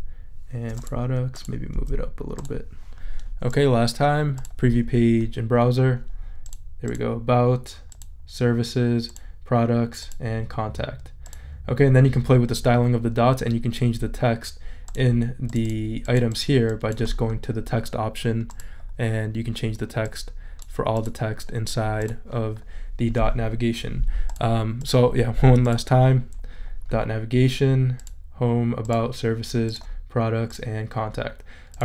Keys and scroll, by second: 1.7 Up.